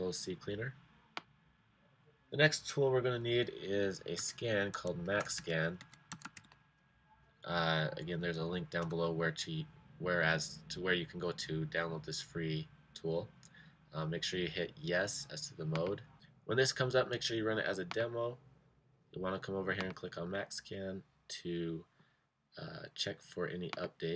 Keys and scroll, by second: 4.1-6.8 typing.